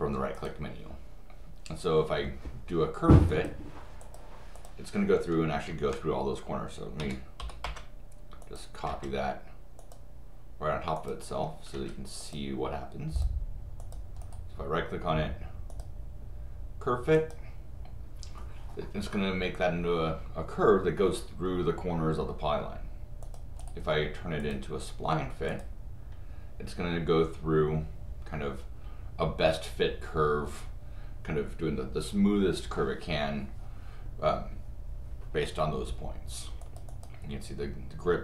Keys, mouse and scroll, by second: 0.3 click, 3.3 click, 4.0 click, 4.5 click, 7.0 c, 7.6 Return, 8.4 click, 8.9 Return, 9.8 click, 11.0 click, 11.7 Escape, 12.2 click, 13.2 click, 13.8 click, 14.2 right click, 15.7 click, 17.1 click, 23.2 click, 23.6 right click, 24.4 click, 25.5 click, 36.6 click, 36.9 click.